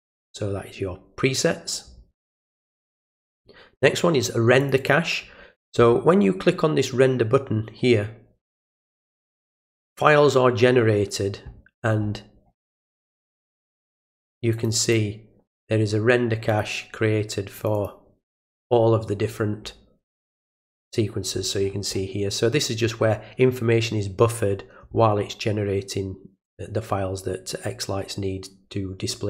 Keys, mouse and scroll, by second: 2.3 click, 4.6 click, 4.8 click, 11.0-11.7 scroll down 1, 11.7-12.1 scroll up 2, 12.8 click, 14.5 click, 14.8 click, 16.5 click, 17.6 click, 17.7 click, 20.4-21.7 middle drag, 20.4-21.6 scroll down 1, 21.6-22.0 scroll down 1, 21.9 middle click.